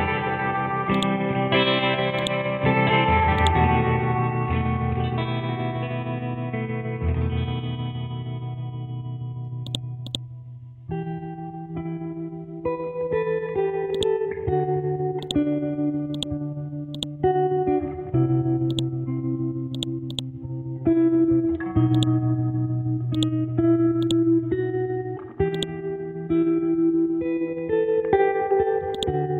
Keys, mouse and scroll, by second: 0.9 click, 4.2 Right, 4.9 Left, 5.1 Right, 7.7 7, 9.7 click, 13.9 click, 20.5 scroll down 1, 21.0 scroll up 1, 21.9 click, 28.9-29.3 drag.